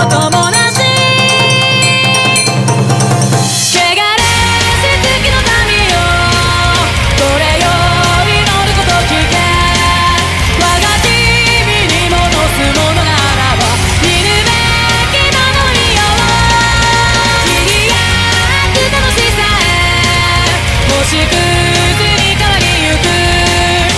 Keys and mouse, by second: 3.2 ctrl+z, 15.5 ctrl+z, 17.6 ctrl+z.